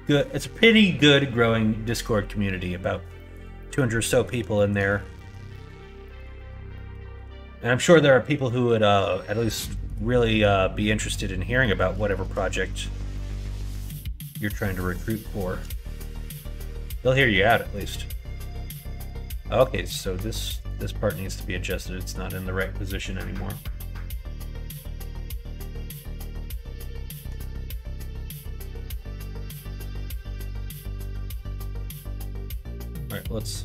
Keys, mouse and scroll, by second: 3.1 middle click, 3.5 middle click, 4.0 middle click, 4.4 shift+middle click, 5.0 middle click, 5.4 middle click, 5.9 shift+middle click, 6.2 middle click, 6.6 middle click, 8.3 middle click, 9.2 middle click, 9.6 shift+middle click, 10.0 middle click, 10.7 middle click, 11.5 middle click, 12.0 shift+middle click, 12.4 middle click, 13.0 middle click, 13.5 shift+middle click, 14.1 middle click, 15.2 shift+middle click, 15.7-16.9 middle drag, 17.6-19.0 middle drag, 19.6 click, 20.0 Tab, 20.5 click, 21.0-22.3 middle drag, 24.3-27.2 middle drag, 28.3 middle click, 29.0 KP_1, 29.4 KP_3, 31.5 KP_9, 32.4 Tab.